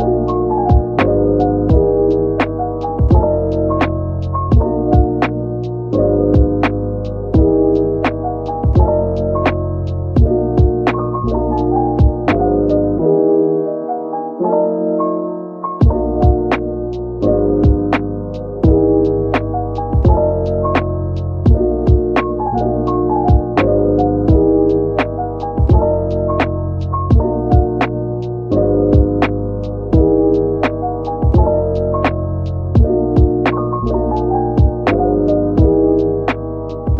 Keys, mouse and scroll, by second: 1.0 ctrl+j, 1.6 Tab, 3.0 typing, 5.6 Tab, 6.1 scroll, 6.2 scroll down 1, 6.6 typing, 14.3-14.6 scroll up 1, 14.8 shift+click, 15.3 shift+double click, 15.8 shift+click, 19.3 ctrl+j, 21.2 shift+click, 24.8 ctrl+z, 25.2 ctrl+z, 26.1 shift+click, 26.8 ctrl+z, 27.6 scroll up 1, 30.3 shift+click, 30.9 ctrl+z, 33.8 shift+click, 34.6 ctrl+z, 36.3 shift+click.